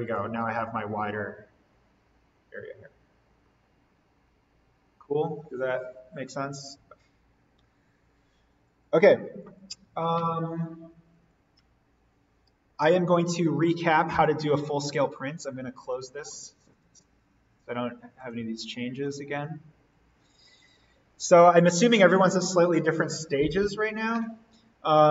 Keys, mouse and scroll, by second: 3.1-3.4 scroll up 1, 15.7 click, 23.3 click, 23.5 alt+v.